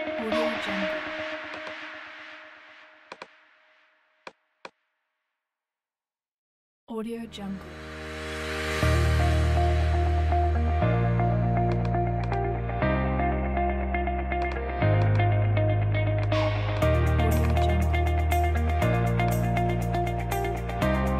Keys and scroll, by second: 4.7 space, 9.1 space.